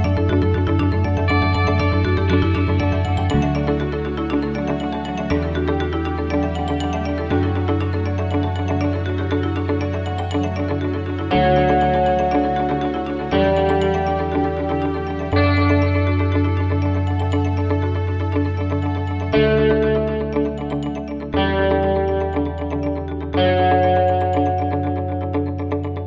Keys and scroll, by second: 0.8 ctrl+=, 8.4 ctrl+c, 8.6 ctrl+v, 13.7 ctrl+c, 13.9 ctrl+v.